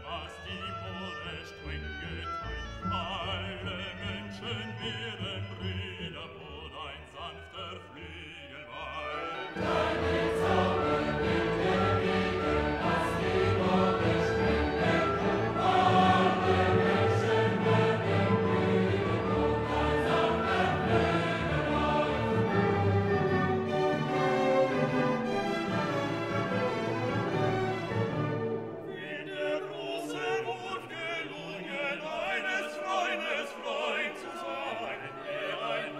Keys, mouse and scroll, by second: 6.3-11.1 drag, 16.0-17.5 drag, 17.5 middle click, 18.3-21.7 drag, 21.7-26.4 drag, 26.4 scroll down 1, 27.9 click, 28.6-28.9 scroll down 1, 33.0 scroll up 1, 33.2 click.